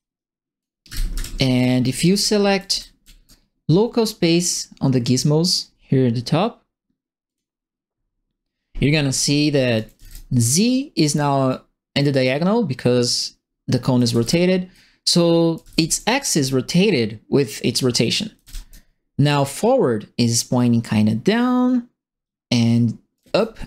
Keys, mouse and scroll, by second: 0.6-3.2 typing, 1.6-3.2 right drag, 7.2 click, 9.5-10.4 typing, 9.7 right click, 11.4-13.1 right drag, 13.8-16.1 typing, 13.9 right click, 15.5 right click, 18.1-18.9 typing, 18.1 right click, 23.1 click, 23.1 a.